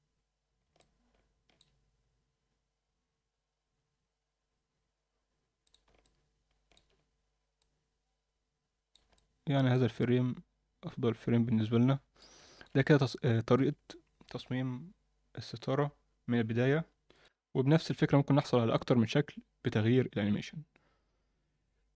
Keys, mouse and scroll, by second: 0.8-1.7 alt+middle drag, 5.7 drag, 6.0-6.7 middle drag, 7.6-8.9 drag, 9.1-9.7 alt+middle drag, 10.0-12.2 alt+middle drag, 12.4 ctrl+alt+middle click, 12.8-13.5 alt+middle drag.